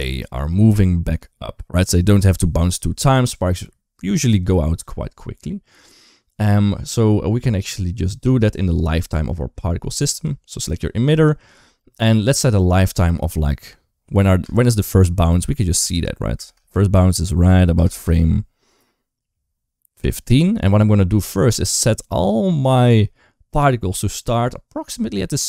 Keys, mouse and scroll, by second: 8.1 click, 9.9 click, 13.0-14.6 drag, 16.2 space, 17.6 space, 17.7 space.